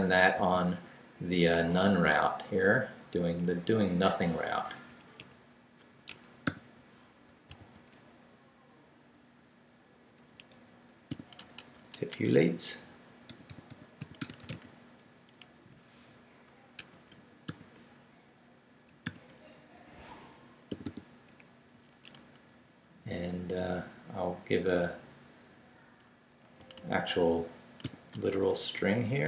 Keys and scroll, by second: 0.3 super+c, 3.4 Down, 4.1 Down, 4.9 Down, 6.1 Escape, 6.4 o, 7.3 super+o, 7.5 super+v, 8.3 super+Left, 8.8 Left, 9.3 Left, 10.2 Left, 11.1-15.1 typing, 16.8 Escape, 17.5 shift+., 19.0 shift+., 19.7 shift+Down, 20.3 Down, 20.7 d, 21.3 Up, 21.7 Right, 22.3 Right, 26.6 Right, 27.1 Right, 27.8 i, 28.1 BackSpace, 28.8 BackSpace.